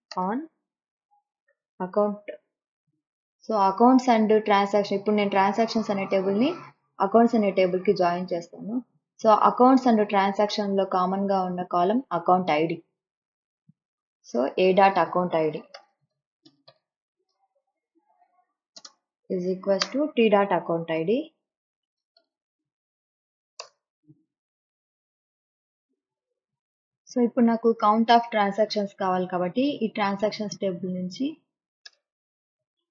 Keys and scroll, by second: 0.0-0.4 typing, 1.5 a, 2.7 ., 15.2-22.2 typing, 23.6 Return, 31.9-32.9 typing.